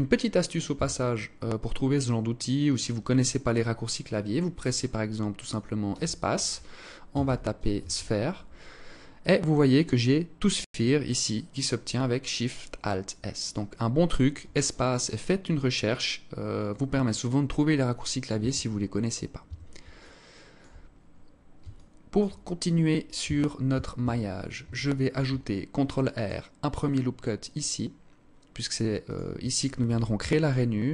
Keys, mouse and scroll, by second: 0.1 Tab, 5.3 space, 13.7 space, 17.7 Tab, 18.8 Tab, 19.3 alt+click, 20.3 scroll up 4, 21.1 alt+shift+click, 22.5 Tab, 23.0 Tab, 23.3 a, 24.4 ctrl+r, 29.1 ctrl+r.